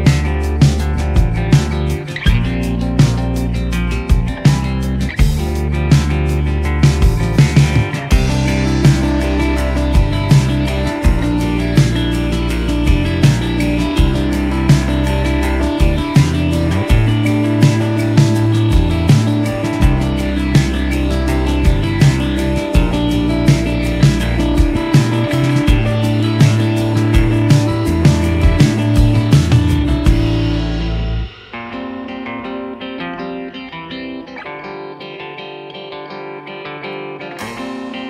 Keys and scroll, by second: 1.4 g, 10.5 ctrl+j, 11.1 ctrl+z, 13.7 ctrl+shift+j, 19.9 g, 20.1 z, 21.2 r, 21.4 z, 23.0 g, 23.1 y, 24.7 g, 24.8 z, 26.8 s, 27.6 g, 27.7 z, 28.8 g, 28.9 z, 32.5 g, 33.1 r, 33.2 z, 34.4 g, 34.8 r, 35.0 z.